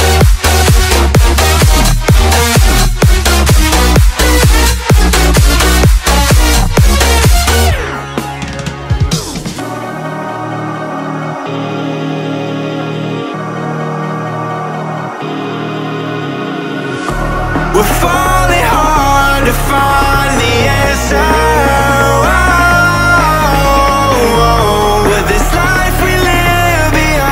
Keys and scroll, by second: 1.4 Return, 4.6 Return, 12.6 Return, 12.9 Up, 19.0 Up, 23.1 Up.